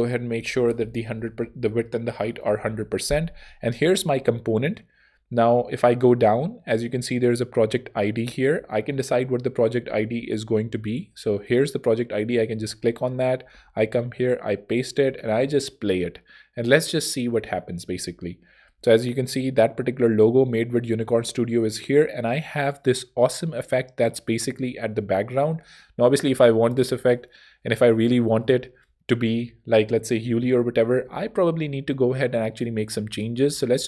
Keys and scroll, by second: 0.6 super+a, 0.9-2.7 typing, 1.4 shift+Tab, 3.5 Return, 8.5 super+Tab, 12.4 super+Tab, 13.5 super+v, 14.0 super+Tab, 14.6 Tab, 26.1 ↺, 31.0 super+Tab.